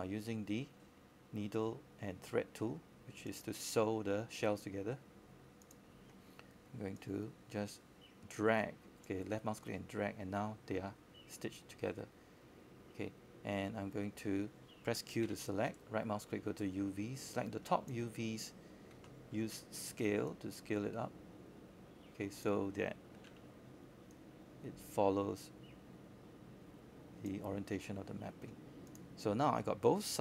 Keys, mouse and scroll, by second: 23.5 scroll up 1, 26.2 click, 26.9-28.6 scroll down 1, 28.6-30.2 drag.